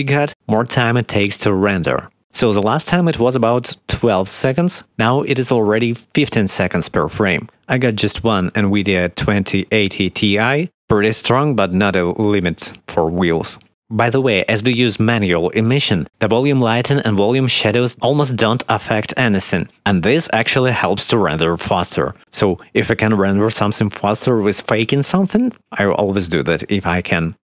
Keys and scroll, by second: 13.4 Escape.